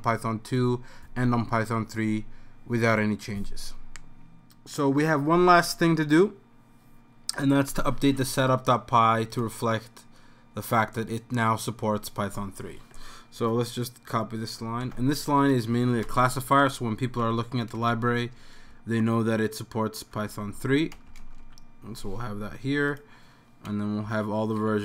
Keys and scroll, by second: 14.8 super+c, 16.1 Return, 16.4 super+v, 17.2 End, 17.8 Home, 17.8 BackSpace, 17.9 BackSpace, 18.7-20.1 Right, 19.3 Right, 19.9 Right, 20.9 BackSpace, 21.4 3, 24.1 Up, 24.6 End.